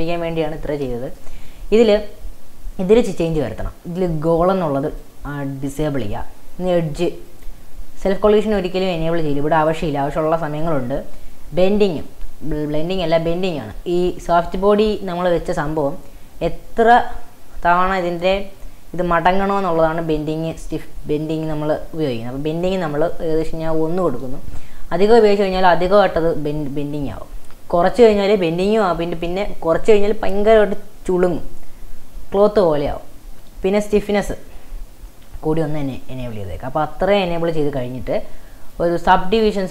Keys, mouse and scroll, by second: 0.2-1.2 scroll down 1, 1.2-1.7 shift+middle drag, 1.7 scroll up 2, 1.9-2.9 shift+middle drag, 2.9-4.4 scroll down 3, 5.0-6.3 drag, 7.3 click, 7.8-8.8 scroll down 5, 8.8 scroll down 2, 22.5-27.1 drag, 35.8 click, 38.7-39.7 drag.